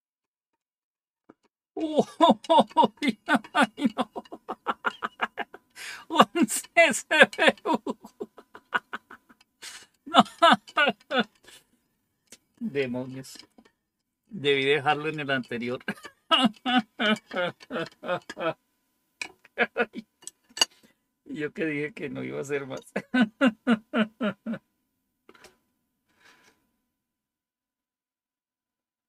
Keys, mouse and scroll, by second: 7.9 click.